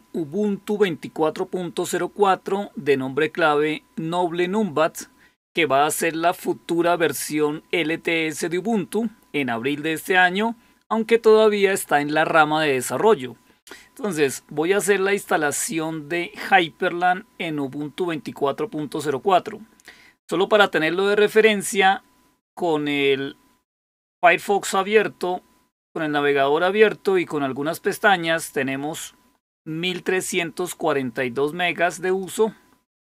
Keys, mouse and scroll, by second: 28.1-30.6 drag, 32.0 click, 32.3 click.